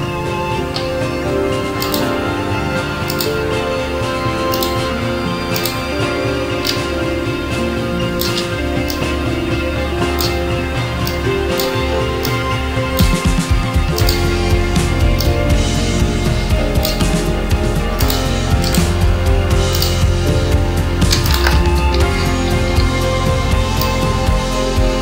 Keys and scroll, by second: 22.2 ctrl+d.